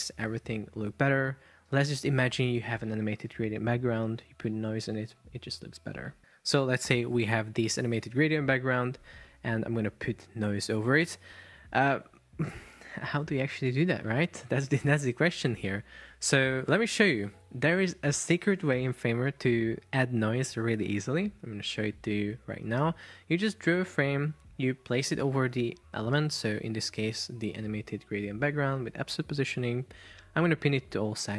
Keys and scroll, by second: 25.6 super+x, 26.2 super+v.